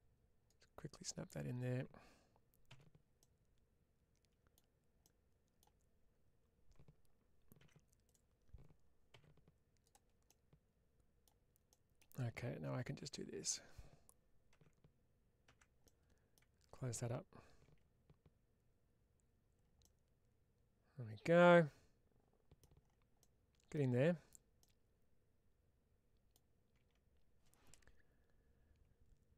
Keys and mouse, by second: 3.0-4.4 middle drag, 4.9 middle click, 7.5 3, 7.9 click, 10.1 middle click, 11.5 middle click, 12.9 1, 13.3-14.4 drag, 14.4 4, 15.7 middle click, 18.8 Tab, 19.7-23.6 middle drag, 24.5-26.2 middle drag.